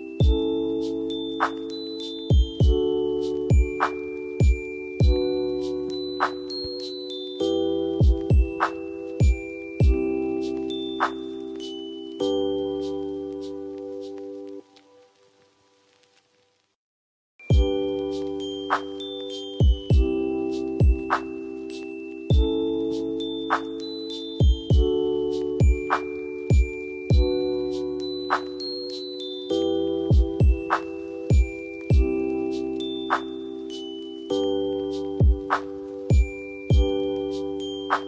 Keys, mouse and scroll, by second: 0.0 click, 0.4 ctrl+r, 0.7 click, 2.2 scroll down 1, 3.4-4.1 drag, 6.7-7.3 click, 9.0 r, 10.8-11.5 typing, 13.2-15.4 drag, 16.1 scroll down 1, 17.4-20.2 drag, 21.4 shift+Page_Up, 22.2 F2, 23.0-24.0 drag, 27.7 ctrl+g, 28.9 shift+click, 30.0 l, 31.1-33.1 drag, 34.0 ctrl+u, 34.6-36.5 drag, 37.7 Down.